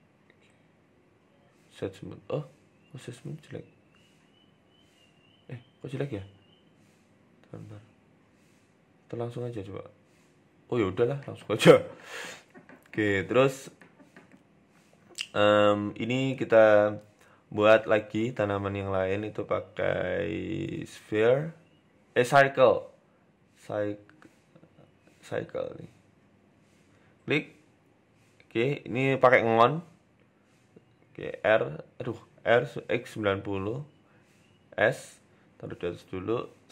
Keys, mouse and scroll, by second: 0.2 Tab, 1.2 w, 1.9-2.2 scroll up 4, 2.2 shift+middle click, 2.5-3.0 scroll up 1, 3.0 ctrl+z, 3.0-3.5 scroll up 2, 3.5-4.2 scroll down 1, 4.2-4.5 scroll down 3, 4.6 w, 5.4 shift+middle click, 6.2 ctrl+z, 6.4 ctrl+z, 7.0 ctrl+z, 7.5 Tab, 7.8 Tab, 8.2 ctrl+z, 8.6 ctrl+z, 8.9 ctrl+z, 9.3 Tab, 9.9 w, 10.6-11.6 scroll down 5, 11.1 shift+middle click, 12.0 right click, 12.2-12.6 scroll up 3, 12.6 shift+middle click, 13.3 Tab, 14.5 shift+middle click, 17.6 shift+a, 20.8 shift+a, 28.0 click, 28.8 click, 30.6 click, 31.1 e, 32.0 ctrl+z, 32.4 r, 36.0 shift+middle click, 36.5 g.